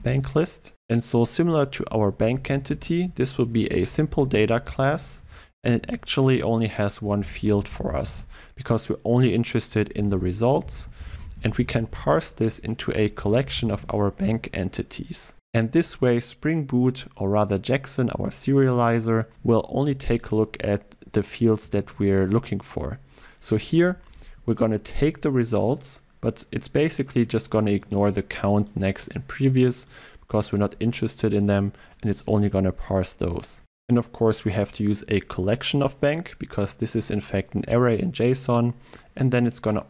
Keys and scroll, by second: 14.3 Return.